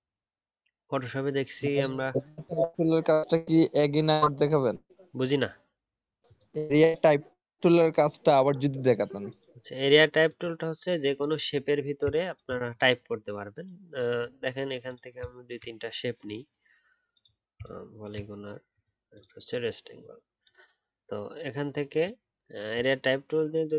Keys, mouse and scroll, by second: 17.6 shift+click.